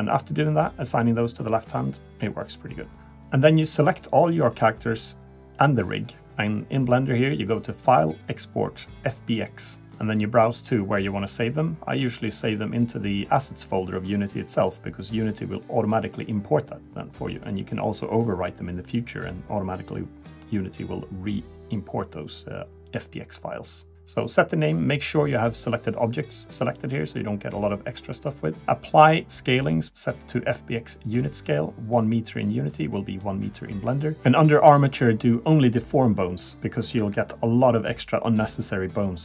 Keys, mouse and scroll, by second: 0.4-1.1 scroll down 2, 1.1 shift+middle click, 2.3 ctrl+Tab, 2.3 click, 2.3 scroll down 1, 2.5 middle click, 3.2 a, 3.3 a, 3.8 b, 6.9 click, 9.4 click.